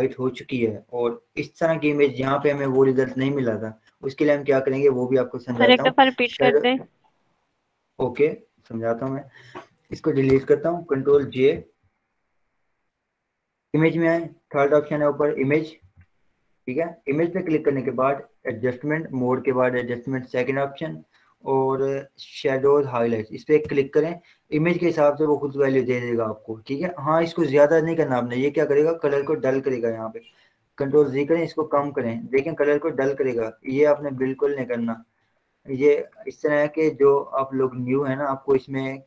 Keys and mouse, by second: 2.8 click, 6.5 click, 11.0 Return, 11.7 ctrl+j, 14.3 ctrl+j, 16.0 click, 16.7 click, 23.4 click, 27.6 click, 28.0-30.6 drag, 30.6 ctrl+z, 32.3 click, 34.3 ctrl+z, 36.1 click.